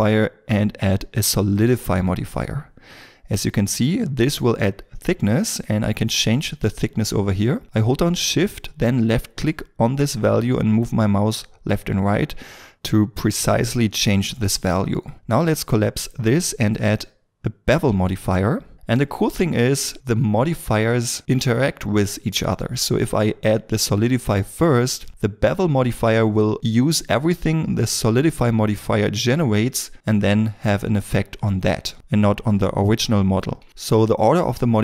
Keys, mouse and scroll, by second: 9.4 shift+click.